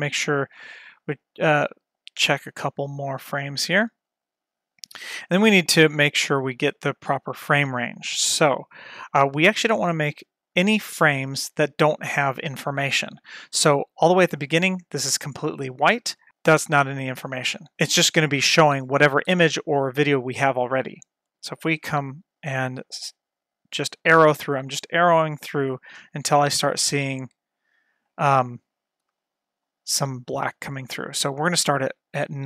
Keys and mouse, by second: 1.2 click, 3.3 F12, 5.2-6.4 middle drag, 8.0-8.8 middle drag, 9.3-10.0 middle drag, 14.2 click, 22.0 Right, 22.3 Right, 24.4 Right, 25.1 Right, 25.5 Right, 26.0 Right, 26.4 Right, 29.2-29.7 middle drag.